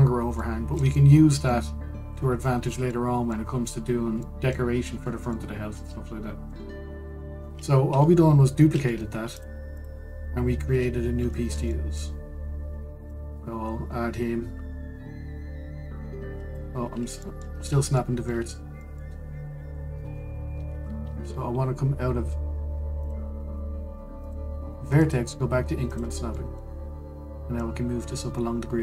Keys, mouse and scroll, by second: 5.4-6.0 scroll down 2, 6.0-7.3 middle drag, 7.3-8.1 scroll down 2, 8.1-8.5 scroll up 2, 8.5 Tab, 9.5 Tab, 10.0 click, 10.4 click, 11.1-11.4 scroll down 1, 12.0-13.7 shift+middle drag, 13.7 click, 17.5-17.9 scroll up 1, 17.9 shift+middle drag, 18.2 scroll up 1, 18.6-21.0 shift+middle drag, 21.0-21.4 scroll down 1, 21.4 ctrl+z, 23.7 click, 24.9 click, 25.7-27.0 drag, 27.0-28.2 middle drag, 28.2 click.